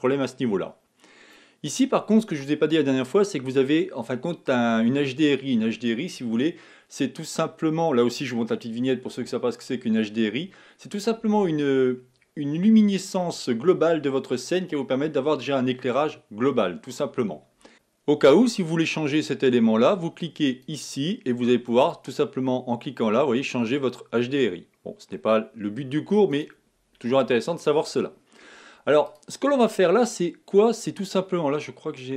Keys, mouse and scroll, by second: 0.4-1.4 drag, 4.9-17.7 drag, 17.7 z, 27.7-29.4 drag, 30.0 click.